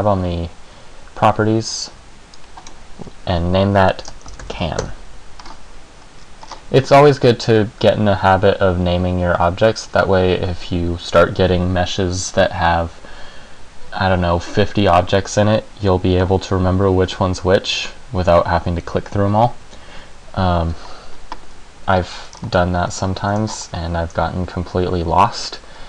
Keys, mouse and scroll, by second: 2.5 click, 6.4 scroll down 1, 6.6-7.2 scroll up 4, 22.5-23.1 scroll down 1, 23.1-23.6 scroll down 1, 23.6-24.2 shift+scroll up 1, 24.2 shift+scroll up 2.